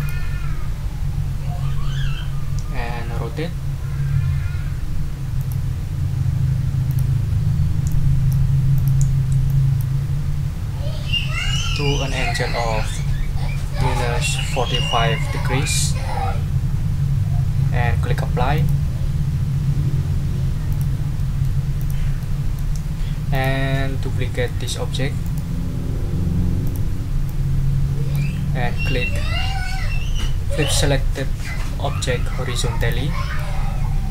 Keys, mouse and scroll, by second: 5.4 click, 6.9 click, 7.9 click, 8.7 click, 9.5 click, 13.8-15.2 typing, 18.5 click, 20.7 click, 21.1 middle click, 21.8 click, 22.2 click, 22.9 ctrl+scroll down 2, 23.3 ctrl+click, 24.0 ctrl+scroll up 1, 24.4 ctrl+middle click, 25.2 right click, 26.6 click, 27.2-28.3 drag, 32.8 click, 33.3-34.1 middle drag.